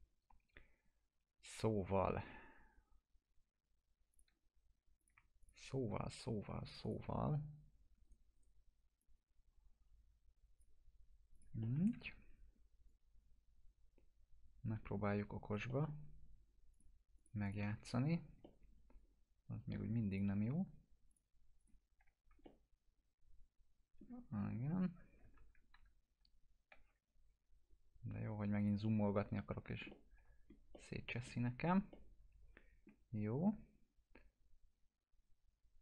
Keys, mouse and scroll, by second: 4.1 click, 5.4 shift+click, 6.8 click, 8.0 right click, 9.0-10.9 drag, 11.6 alt+middle click, 11.9 e, 12.9-15.7 drag, 15.7 alt+middle click, 16.7 click, 17.7 F4, 18.4-20.0 alt+middle drag, 20.1 click, 22.0 F4, 22.4-24.0 alt+middle click, 24.7 scroll up 1, 25.2 scroll down 1, 25.3 ctrl+z, 26.9 scroll up 1, 28.6 click, 29.2-29.6 scroll up 1, 29.9-30.5 alt+middle drag, 31.5 scroll down 1, 31.9-32.8 alt+middle drag, 34.7 scroll down 1.